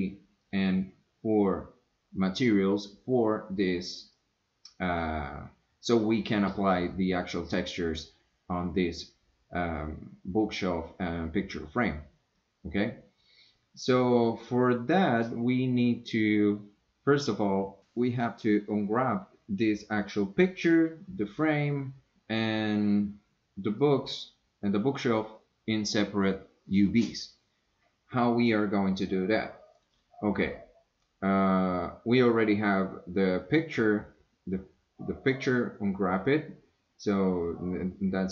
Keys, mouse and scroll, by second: 0.4 click, 4.2-5.1 drag, 14.2 click, 22.4-23.0 drag, 23.8 click, 29.8 click.